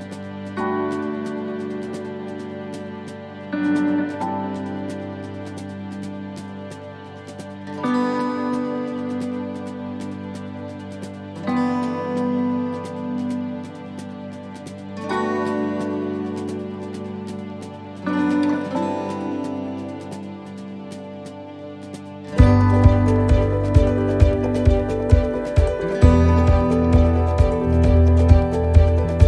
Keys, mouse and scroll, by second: 0.3 middle click, 1.9 shift+middle click, 2.3-3.3 scroll up 4, 2.7 middle click, 6.0 ctrl+r.